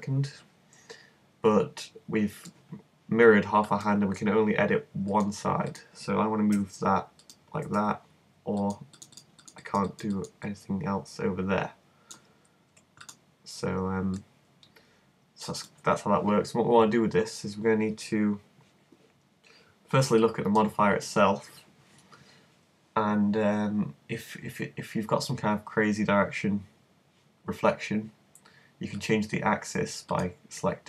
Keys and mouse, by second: 3.7-6.6 middle drag, 6.6 g, 7.3 click, 7.7 z, 9.3 super+right click, 9.7 super+click, 10.7-12.3 right drag, 14.2 middle click, 14.3 click, 14.5-22.7 middle drag, 29.0-30.8 drag.